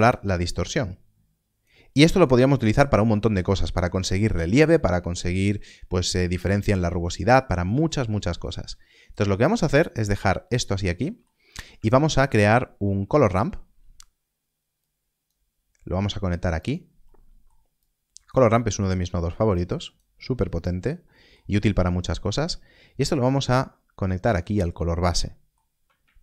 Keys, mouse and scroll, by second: 2.5 click, 2.6 middle click, 2.9 scroll down 1, 7.6 scroll down 1, 8.4 click, 9.3 middle click, 9.8 click, 11.0 middle click, 11.3 scroll down 1, 12.3 shift+a, 14.7 click, 17.0 middle click, 17.8 click, 18.5 middle click, 18.8-19.4 scroll down 1, 19.5 click, 21.1 middle click, 21.6-23.0 scroll up 1, 23.0 click, 25.2 middle click.